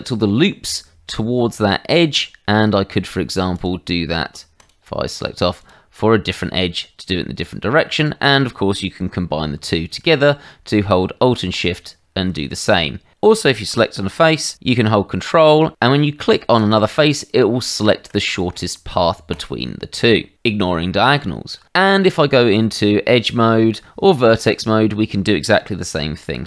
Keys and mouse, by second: 3.5 alt+click, 4.6 click, 5.6 alt+click, 11.5 alt+shift+click, 16.5 ctrl+click, 18.2 click, 19.3 ctrl+click, 21.9 Tab, 24.5 click, 26.2 ctrl+click.